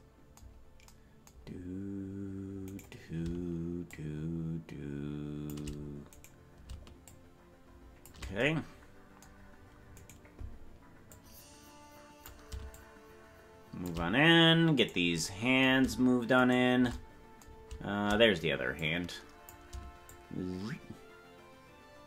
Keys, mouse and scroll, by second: 1.5-2.2 scroll up 1, 2.8 right click, 3.9-5.5 shift+drag, 6.2 right click, 7.0-8.1 shift+drag, 10.0 right click, 11.1-12.5 drag, 12.7-13.9 shift+drag, 14.8 right click, 16.3 shift+right click, 18.7 click, 20.1-22.0 shift+drag.